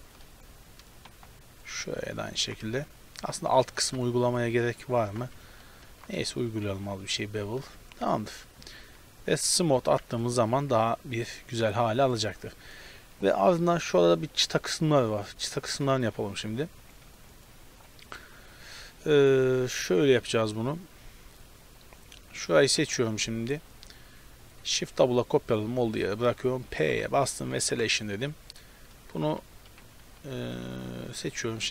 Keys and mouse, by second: 0.4 a, 1.6-3.3 right drag, 2.4 ctrl+b, 5.1 ctrl+z, 6.0 ctrl+b, 7.7 Tab, 8.7 t, 9.4-12.2 middle drag, 9.9 t, 12.7-14.9 middle drag, 16.9 middle drag, 18.1-18.8 right drag, 18.8 Tab, 19.3 Tab, 19.5 right click, 19.6 Tab, 22.7 KP_Decimal, 23.5-24.7 middle drag, 24.7 shift+d, 26.9 p, 27.7 Tab, 27.9-31.7 right drag, 29.3 t, 30.1 z.